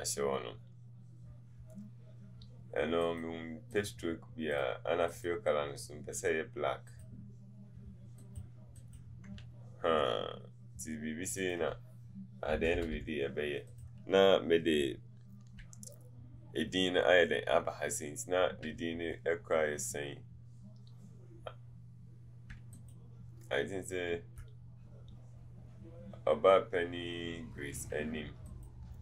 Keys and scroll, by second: 12.6 Down.